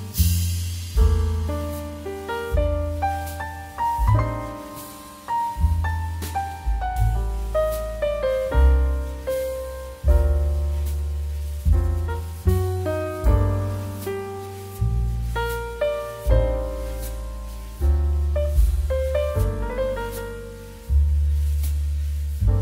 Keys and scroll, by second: 0.2 c, 12.3 z, 16.8 ctrl+c, 16.9 ctrl+v, 18.2 ctrl+shift+2, 22.0 shift+f.